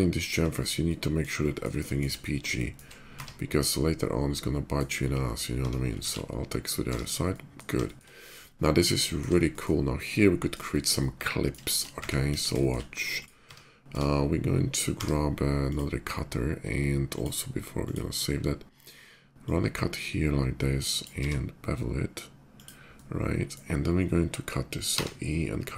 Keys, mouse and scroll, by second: 0.0 shift+click, 0.2 shift+middle click, 0.5 shift+middle click, 1.1 shift+middle click, 1.6 shift+middle click, 2.3 shift+middle click, 2.9 Tab, 3.3 middle click, 3.6 middle click, 4.2 middle click, 4.8-5.1 middle drag, 5.9 alt+x, 6.4 Tab, 7.1 middle drag, 7.6 shift+middle drag, 8.1-10.0 shift+middle drag, 10.4 shift+middle drag, 10.7-11.3 shift+middle drag, 11.4 shift+middle drag, 12.1 KP_5, 12.4 middle click, 12.8 click, 13.2 Tab, 13.7 Tab, 15.0 d, 15.4 click, 16.8 click, 17.6 click, 19.0-20.8 drag, 21.0 b, 22.3 click, 22.3 b, 22.7-23.3 middle drag, 24.8 e.